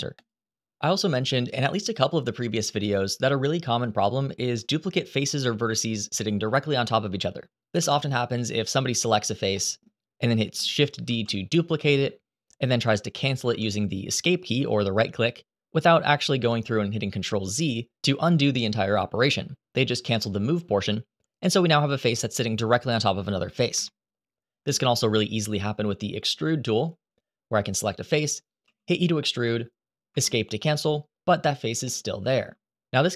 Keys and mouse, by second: 4.1 shift+middle click, 4.4 middle click, 7.6 3, 8.6 click, 9.3 middle click, 10.8 shift+d, 13.2 Escape, 21.6 g, 23.5 Escape, 24.5 shift+middle click, 26.4 click, 28.4 e, 29.8 Escape, 31.6 shift+middle click.